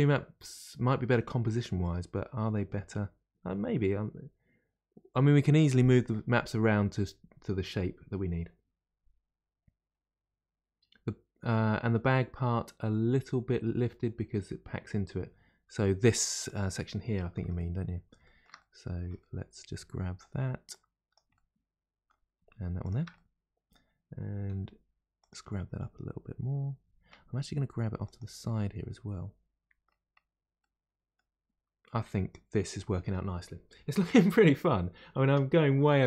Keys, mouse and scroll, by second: 16.4 click, 17.2 middle click, 17.8-18.1 scroll up 2, 18.2-19.1 shift+middle drag, 19.1 Tab, 19.2-21.1 middle drag, 20.7 click, 21.1 click, 21.3-22.9 middle drag, 22.8 shift+click, 23.1-24.5 middle drag, 24.5 g, 25.5-27.5 middle drag, 27.5 g, 28.4-30.2 middle drag, 30.2-30.6 scroll down 2, 30.6-31.9 middle drag, 31.9 Tab.